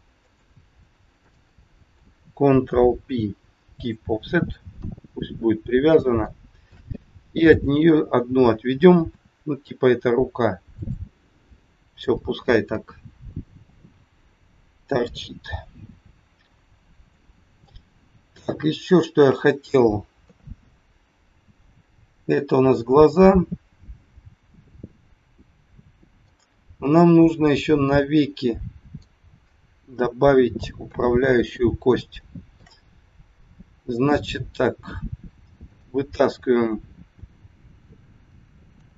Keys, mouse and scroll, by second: 0.2 click, 0.5 shift+click, 1.1 shift+click, 2.6 ctrl+p, 4.6 KP_1, 5.2 scroll down 1, 5.7 scroll down 1, 6.2 shift+middle click, 7.5 click, 9.1 e, 17.1 middle click, 18.0-18.6 scroll up 4, 18.4 shift+middle click, 20.1 KP_3, 20.7-21.1 scroll up 2, 25.5 scroll down 2, 26.2 middle click, 30.7 KP_3, 31.3 scroll up 2, 32.2 shift+middle click, 35.7 click, 38.7 e.